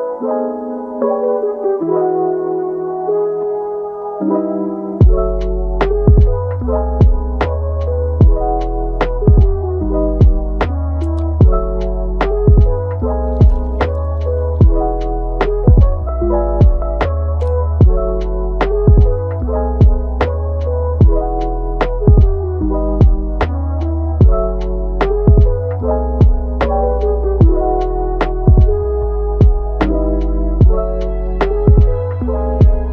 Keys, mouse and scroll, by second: 1.2 click, 1.6 g, 2.3 click, 2.7 g, 3.8 drag, 4.2 g, 5.6-8.6 middle drag, 8.7 Tab, 9.0 click, 9.9 middle click, 10.3 g, 11.5 click, 11.8 g, 12.6-13.4 middle drag, 13.4 g, 14.7 middle click, 15.2 g, 15.7 Tab, 18.2-18.6 middle drag, 18.6 click, 19.1 shift+d, 20.3 r, 22.6-23.8 middle drag, 23.8 Tab, 24.3 drag, 24.7 g, 25.6-26.2 middle drag, 26.2 click, 26.6 g, 27.1 click, 27.4 g, 28.7 g, 29.6 click, 29.8 g, 30.9-31.3 middle drag, 31.3 g, 32.1-32.9 middle drag.